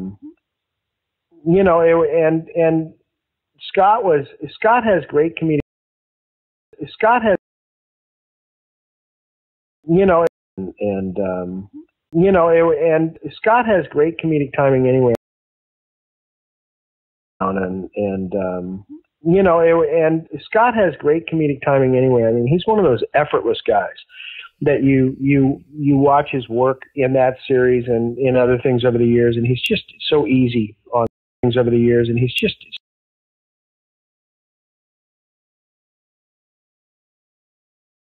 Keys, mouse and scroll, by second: 3.1-5.7 drag, 5.5 space, 6.4 ctrl+shift+Delete, 6.7 space, 7.3 space, 7.8-8.9 drag, 9.5 ctrl+shift+Delete, 9.8 space, 10.2 space, 10.4 click, 10.5 space, 13.4 click, 14.5 click, 15.1 space, 15.5-16.7 drag, 17.2 click, 17.3 space, 18.0 ctrl+s, 23.4-24.8 drag, 25.1 click, 26.1 click, 27.5-28.7 drag, 29.1 click, 29.7 ctrl+s, 31.0 space, 31.3 click, 31.3 space, 32.7 space, 33.3 click, 33.4 click, 34.6 click, 35.7-36.8 shift+drag, 37.5 click, 37.6 space.